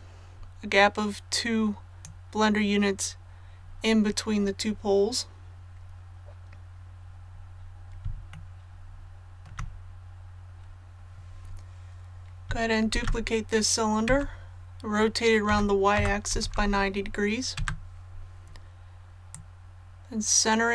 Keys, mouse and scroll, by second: 6.9 scroll up 1, 8.3 shift+middle click, 10.1 scroll down 1, 12.9 shift+d, 15.4-16.3 typing, 19.3-20.7 drag.